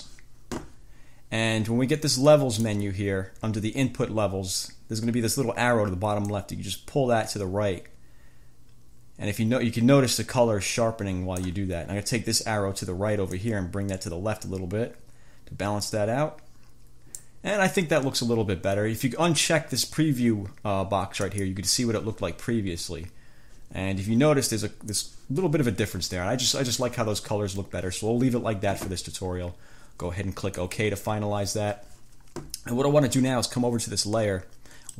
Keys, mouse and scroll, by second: 2.3 click, 6.5-11.9 drag, 13.5-17.5 drag, 21.4 click, 25.1 click, 30.7 click.